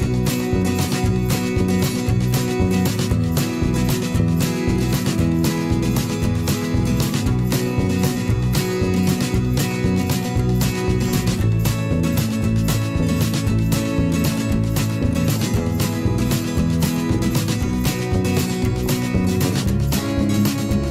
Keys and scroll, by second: 0.5 z, 17.0 alt+s, 19.6 alt+s.